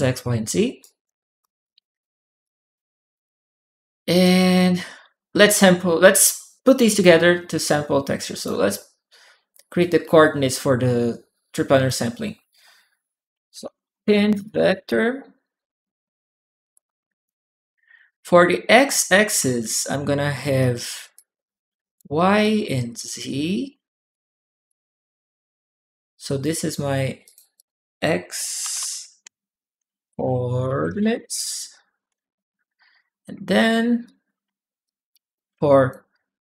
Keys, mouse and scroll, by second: 0.6 right click, 1.2 right click, 1.6 click, 2.2 click, 2.9 click, 3.7 click, 3.7 right click, 7.9 click, 7.9 right click, 9.6-11.6 drag, 13.1-14.8 typing, 16.5 click, 18.3 click, 19.4 ctrl+click, 20.9 ctrl+click, 22.2-23.5 ctrl+drag, 23.9 ctrl+right click, 24.5-26.2 drag, 27.0 click, 27.3 click, 28.5-31.4 typing, 31.9 Return, 31.9 Return, 33.3 ctrl+w, 33.8 ctrl+right click, 34.2 ctrl+w, 34.6 click, 35.5 click, 35.9 click.